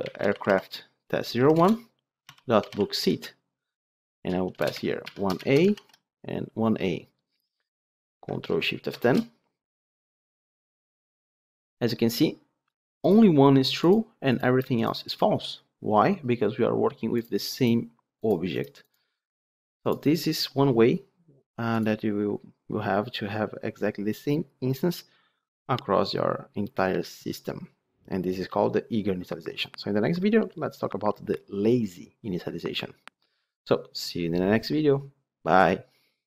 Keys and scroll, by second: 1.5 Return, 5.6 ctrl+d, 8.8 ctrl+shift+F10.